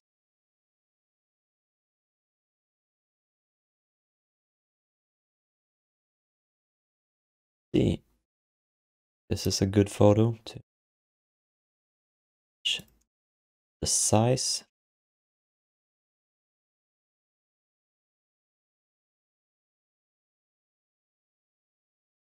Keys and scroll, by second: 16.2 r, 19.0 f, 19.7 alt+q, 20.5 alt+q.